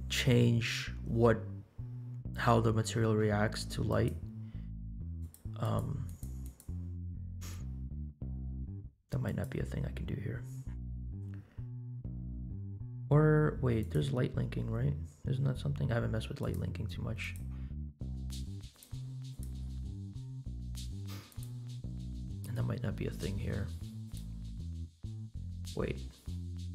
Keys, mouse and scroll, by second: 3.8 click, 5.2 click, 5.6 click, 6.0 click, 6.4 click, 9.2 click, 10.6-11.3 scroll down 8, 11.4-12.3 scroll up 1, 13.9 click, 15.1 scroll up 2, 15.7-16.7 scroll up 1, 16.7 click, 17.8 click, 18.8 click, 19.4-21.1 drag, 21.2 click, 24.0 click, 26.0-26.7 scroll down 2.